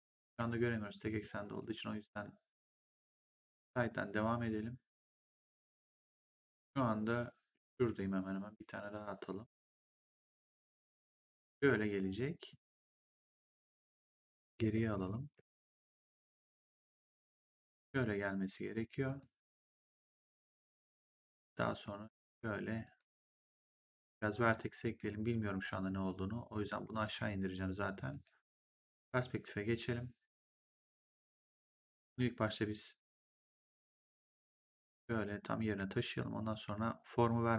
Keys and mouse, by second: 1.0 right click, 2.6 click, 9.5 click, 11.2 click, 12.4 click, 14.8 ctrl+z, 17.6 click, 19.0 click, 21.2 click, 24.8 w, 25.8 right click, 26.5 click, 28.0 right click, 28.8 click, 31.3 right click, 32.9 click, 34.1 click, 36.4 click.